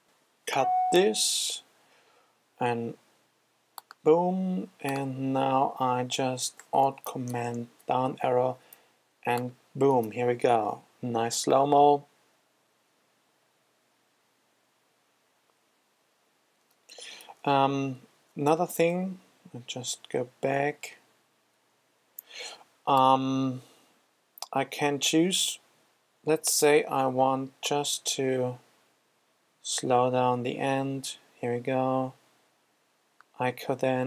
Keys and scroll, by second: 7.8 alt+super+Down, 19.4 super+z.